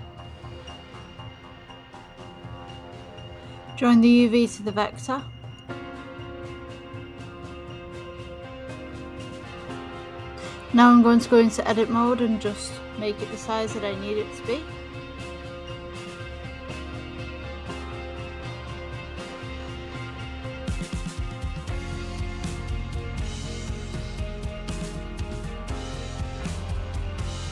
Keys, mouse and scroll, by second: 2.0 click, 3.1 r, 6.5 ctrl+z, 9.3-13.2 drag, 14.2-15.4 middle drag, 15.4-15.7 scroll up 3, 15.7-16.7 scroll down 6, 19.6-25.1 drag, 25.1 g, 27.0-27.5 middle drag.